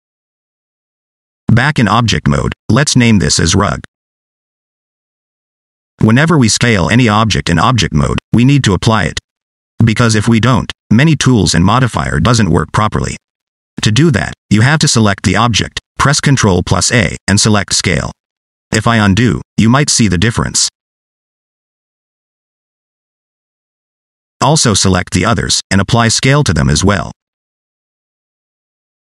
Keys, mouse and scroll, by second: 0.0 Tab, 0.2 scroll down 1, 0.3 middle click, 0.7 right click, 1.7 middle click, 2.2 scroll down 2, 2.4 middle click, 3.0 F2, 4.8 scroll down 1, 5.0 shift+middle click, 5.4 middle click, 6.0 scroll up 1, 6.3 middle click, 11.5 click, 12.3 shift+middle click, 12.8 scroll up 3, 13.1 shift+middle click, 13.6 middle click, 14.3 shift+middle click, 14.6 middle click, 15.0 shift+middle click, 15.3 scroll up 2, 16.4 ctrl+a, 19.4 ctrl+z, 21.3 ctrl+shift+z, 23.4 scroll down 2, 23.8 shift+middle click, 24.0 scroll down 2, 24.4 a, 25.1 shift+middle click, 25.6 scroll up 2, 26.2 shift+middle click, 26.2 scroll up 1, 26.4 middle click, 27.2 ctrl+a, 28.9 scroll down 2.